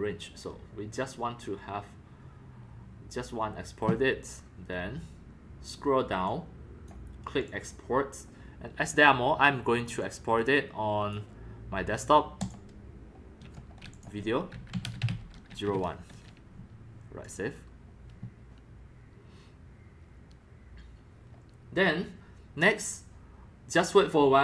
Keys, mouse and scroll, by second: 6.2-6.8 drag, 6.9-7.5 drag, 7.6 click, 8.1 drag, 10.0-11.0 drag, 11.1 click, 11.3-14.0 drag, 14.3-16.2 typing, 17.4-17.9 drag, 18.3-22.5 drag.